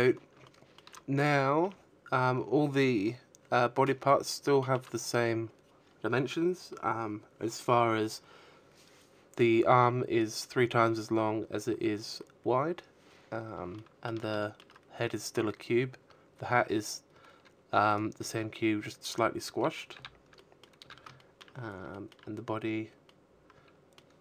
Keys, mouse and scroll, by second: 1.7 shift+middle click, 3.7-5.2 scroll up 1, 11.1 shift+middle click, 11.7 shift+middle click, 15.2 right click, 17.7 middle click, 17.7 z, 18.1 a, 18.5 shift+middle click, 18.9-19.2 scroll down 4, 19.2 shift+middle click, 20.4 middle click, 22.0 shift+middle click, 22.4 middle click.